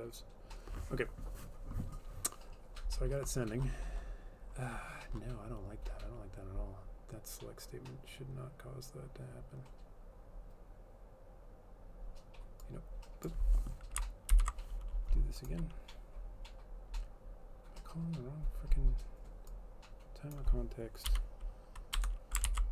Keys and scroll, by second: 14.4 ctrl+/, 22.1 BackSpace, 22.6 ctrl+s.